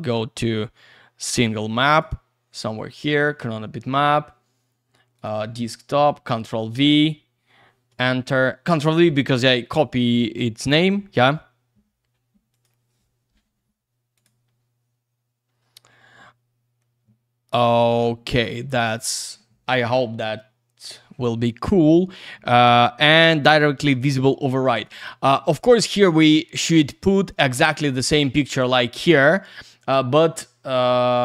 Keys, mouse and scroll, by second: 1.2 click, 1.9 click, 3.1 click, 3.2 click, 3.3 double click, 5.1 click, 5.9 ctrl+v, 7.9 Return, 10.7 click, 12.5 click, 14.1 click, 23.4 click.